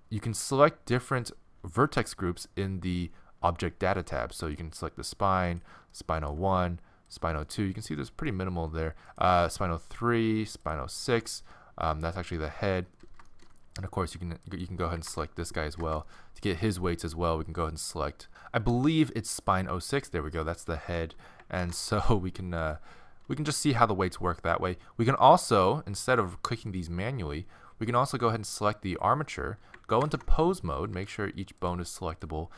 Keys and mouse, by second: 1.1-4.5 middle drag, 6.0 middle click, 7.0 middle click, 7.5-8.9 middle drag, 11.2 middle click, 12.6-15.1 middle drag, 15.1 ctrl+Tab, 16.0 middle click, 18.0 click, 18.6 middle click, 20.2-21.4 middle drag, 21.6 ctrl+Tab, 22.7-24.5 right drag, 25.2-28.3 drag, 28.3-30.0 right drag, 30.0 ctrl+Tab, 30.8 a, 30.9 a, 31.6-32.5 right drag.